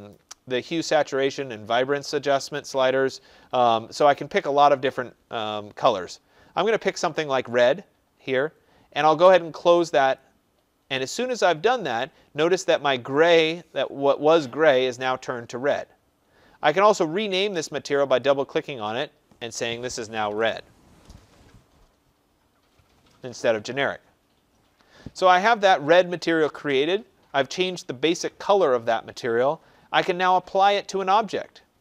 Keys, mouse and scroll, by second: 10.1 click, 17.9 click, 18.2 click, 19.3 click, 19.9-20.9 typing.